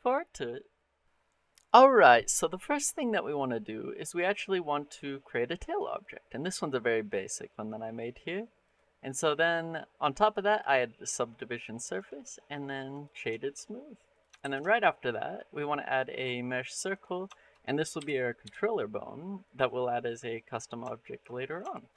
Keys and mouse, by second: 2.9 middle click, 4.3-5.0 middle drag, 5.4 middle click, 8.1 middle click, 8.5 click, 10.3 click, 11.8-13.0 drag, 13.2 shift+middle drag, 13.5 middle click, 14.2 shift+a, 17.2 shift+middle drag, 17.8 g, 18.3 x, 19.3 click, 20.7 shift+click, 21.5 shift+middle drag.